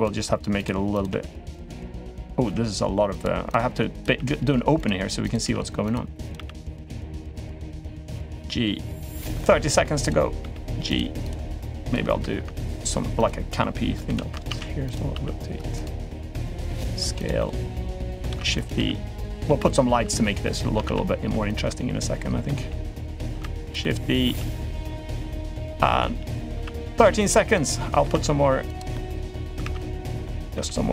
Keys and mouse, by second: 0.7 click, 0.8 g, 2.0 click, 2.2 g, 3.2 click, 3.7 click, 3.9 g, 5.0 click, 5.2 g, 6.0 click, 6.1 g, 6.9 click, 7.1 g, 7.7 click, 8.0 g, 9.2 middle click, 9.8 click, 10.2 g, 11.0 click, 11.6 click, 11.9 l, 12.9 click, 13.8 l, 14.2 shift+d, 14.9 r, 15.9 s, 16.6 g, 17.1 middle click, 18.1-20.6 typing, 20.2-21.3 shift+middle drag, 21.4 middle click, 22.3 g, 23.1 shift+d, 23.6-24.0 middle drag, 24.0 g, 24.7-25.2 middle drag, 26.3 r, 26.8 g, 27.4 middle click, 27.9 shift+d, 28.7 middle click, 30.0 middle click.